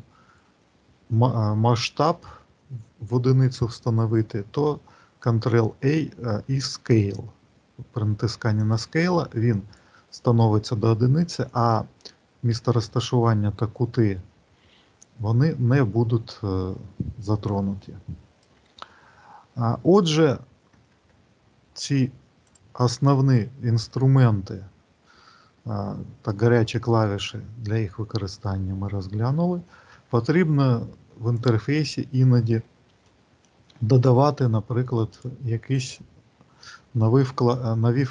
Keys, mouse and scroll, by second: 17.2 click, 32.2 middle click, 35.0 click, 36.2 n, 37.5 middle click.